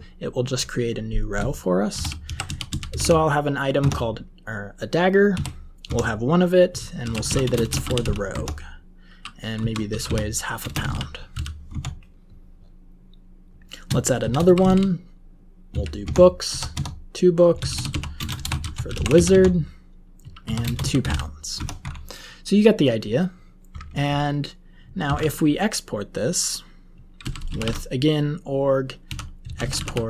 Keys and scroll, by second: 1.6-3.6 typing, 3.7 Tab, 5.3 1, 5.8 Tab, 6.7-11.8 typing, 13.9-22.4 typing, 16.0 Tab, 25.0 alt+x, 26.9-30.0 typing.